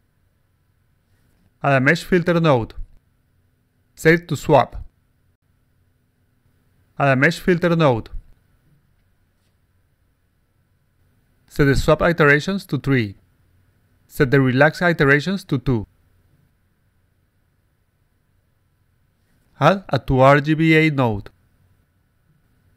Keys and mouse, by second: 0.9 click, 2.1 click, 2.8 click, 3.2 click, 3.4 click, 3.7 click, 3.9 click, 4.6 click, 6.7 click, 7.9 click, 8.8 click, 9.1 click, 9.3 click, 9.7 click, 10.9 click, 11.9 click, 12.6 3, 15.0 click, 15.1 click, 16.6 click, 17.0 2, 17.5 click, 17.7 click, 17.9 click, 18.5 click, 19.4 click, 20.4 click, 21.5 click.